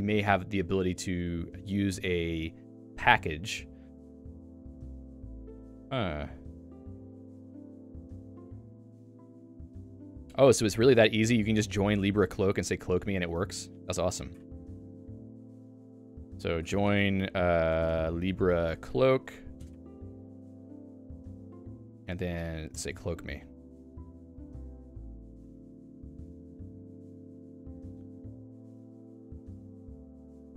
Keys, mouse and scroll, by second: 23.5 Return.